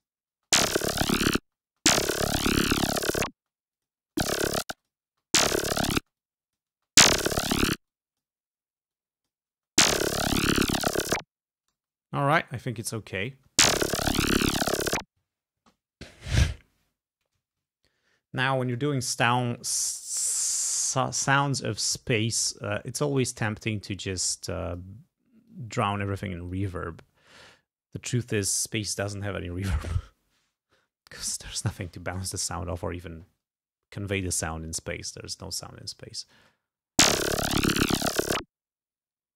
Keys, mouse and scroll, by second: 0.0 click, 0.4 space, 1.5 space, 3.5 space, 3.8 click, 4.1 space, 4.8 space, 4.9 click, 6.1 space, 6.2 click, 6.9 space, 7.8 space, 8.0 click, 9.0 click, 9.6 space, 11.8 space, 12.3 g, 12.6 scroll down 1, 13.4 space, 14.3 scroll up 1, 15.7 space, 19.2 ctrl+scroll down 1, 19.9 ctrl+scroll up 2, 21.1 click, 22.5-23.6 drag, 23.9-25.0 drag, 25.6 click, 26.6 click, 36.5 space.